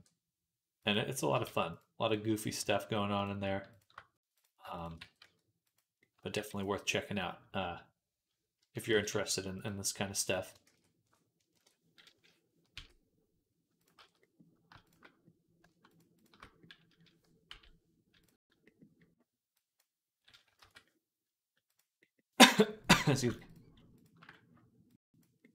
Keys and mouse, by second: 1.3 Tab, 1.6-6.0 right drag, 2.4 Tab, 3.1 shift+click, 3.1 shift+middle click, 4.2 click, 4.2 middle click, 4.8 g, 6.0 ctrl+click, 6.2 ctrl+r, 6.5-10.1 middle drag, 8.4 a, 8.7 s, 10.1 click, 10.3-19.4 shift+middle drag, 10.5 shift+s, 11.4 ctrl+KP_Add, 12.6 s, 13.8 ctrl+z, 17.3 m, 19.4-22.7 drag, 20.4 ctrl+z, 22.7 middle click, 23.3 alt+shift+click, 23.4 alt+shift+middle click, 23.8 alt+shift+click, 24.1 alt+middle click, 24.7-25.5 drag.